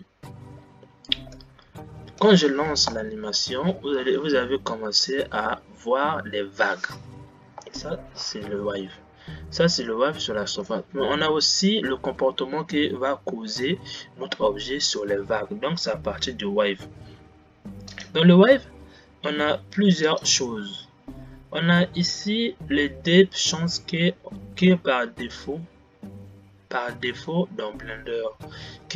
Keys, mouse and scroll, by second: 0.0 click, 1.6-3.1 middle drag, 3.1 space, 8.1 space, 11.8 click.